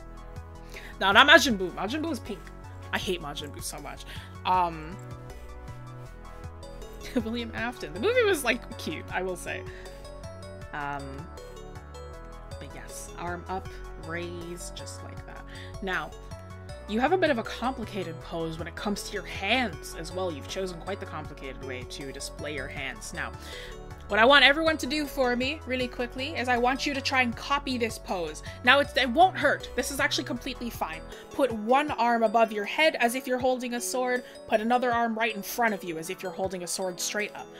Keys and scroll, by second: 10.6 scroll, 16.3-16.9 scroll, 18.8-19.3 scroll, 20.4-20.9 scroll.